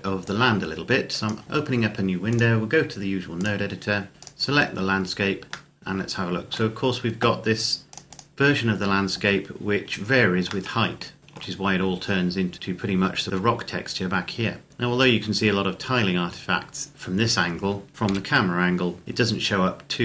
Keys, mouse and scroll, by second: 0.0 click, 4.1 right click, 4.9-5.5 scroll down 1, 5.5 shift+middle click, 7.7 click, 10.5 shift+middle click, 14.7-15.1 scroll up 1, 15.1-15.5 scroll down 1, 17.9 KP_0, 19.1-19.5 scroll up 1.